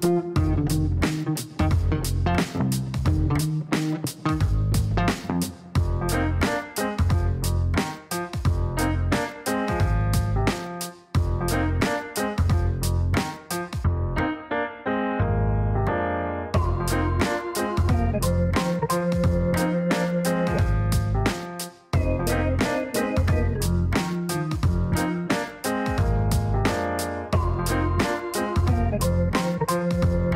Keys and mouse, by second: 4.6-9.0 typing, 9.9 click, 13.5 click, 14.6 click, 14.8 click, 15.0 click, 21.8-23.8 typing, 24.3 KP_Enter, 26.5 click, 26.7 click, 27.9 click, 28.7 click, 29.5 click, 30.2-30.3 typing.